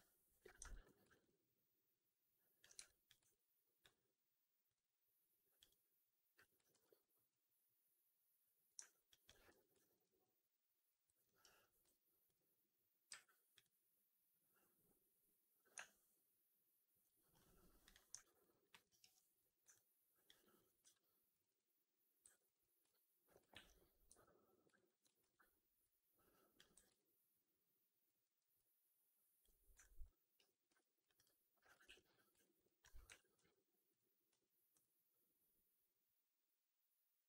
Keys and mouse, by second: 0.6 ctrl+f, 1.0 alt+right click, 1.1-2.5 alt+drag, 2.7 3, 3.0 click, 3.2 alt+click, 4.7-5.7 drag, 6.6 ctrl+e, 7.3-8.6 drag, 8.8 alt+click, 8.9 alt+click, 9.4 4, 9.7 alt+drag, 10.1-10.8 alt+drag, 10.9 alt+middle drag, 11.1 alt+right drag, 11.7 q, 13.0 q, 18.1 alt+right drag, 18.3 alt+click, 18.6 alt+middle drag, 18.7 alt+right drag, 19.3 click, 19.6-20.1 alt+drag, 20.3 alt+right drag, 20.7 2, 22.1 w, 23.5 ctrl+f, 24.0 3, 24.6 alt+right click, 25.1 ctrl+e, 25.8 click, 26.6 w, 26.8-27.9 alt+drag, 28.1 middle click, 28.4 alt+click, 29.7 alt+click, 29.9 alt+right click, 30.6 2, 31.1 click, 31.8 ctrl+f, 32.3 alt+right click, 32.5 alt+click, 33.0 4, 33.2 q, 34.2 q.